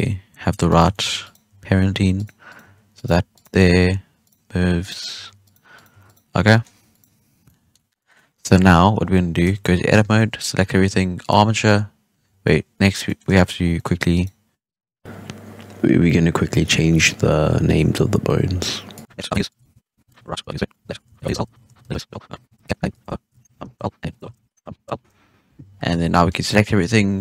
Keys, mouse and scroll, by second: 0.8-1.2 shift+middle drag, 1.2 right click, 1.4 r, 2.4 right click, 2.6 r, 3.3 right drag, 3.5 r, 4.7 right click, 5.1 r, 5.7 right click, 5.8 r, 6.0 right click, 6.2 scroll down 1, 6.4-6.8 middle drag, 6.8 right click, 7.4-7.8 middle drag, 7.8 scroll down 1, 7.9 middle drag, 8.1 scroll up 2, 8.4 a, 8.5-8.9 scroll down 1, 8.9 scroll up 1, 9.1 scroll down 1, 9.4 Tab, 9.9 a, 11.1-12.2 drag, 12.2 scroll up 1, 12.4 middle click, 12.4-13.0 scroll down 1, 13.0 middle click, 13.5 scroll up 2, 13.7 middle click, 14.1 right click, 14.8 right click, 14.9 shift+middle click, 15.3 right click, 15.4 middle click, 15.8 click, 16.4 p, 16.6 BackSpace, 16.7 r, 17.5 click, 17.8 click, 18.3 BackSpace, 18.5 w, 18.8 right click, 18.9 click, 19.5 click, 19.6 right click, 20.0-21.1 drag, 21.1 BackSpace, 21.6 Right, 21.7 Left, 22.0 BackSpace, 22.3 click, 22.4 BackSpace, 22.7 middle click, 22.8 right click, 23.1 p, 24.0 right click, 24.2 w, 25.7-26.1 scroll down 3, 25.9 a, 26.1-27.2 middle drag.